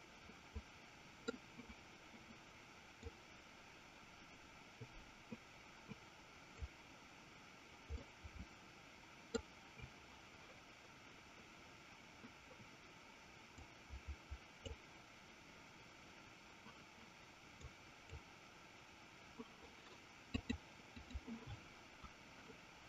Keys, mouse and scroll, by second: 3.6-7.1 drag, 8.1-9.5 middle drag, 14.0-15.3 drag, 18.1 click, 20.4-22.2 drag.